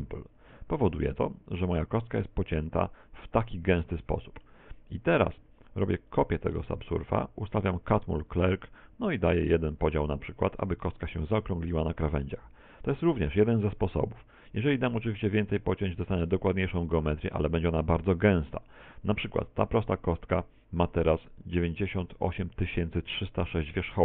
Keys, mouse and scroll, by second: 1.3 z, 2.0 middle click, 6.5 click, 7.7 click, 9.4 click, 9.8 click, 10.7 z, 11.4 middle click, 12.2 middle click, 13.2 middle click, 15.6 click, 16.0 click, 16.4 click, 17.7 middle click.